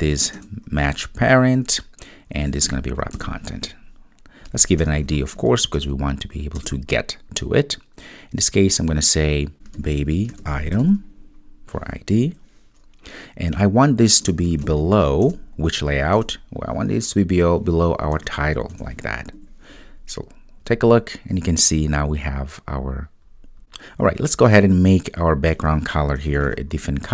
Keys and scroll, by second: 0.4 Return, 15.3 Return, 23.6 super+s.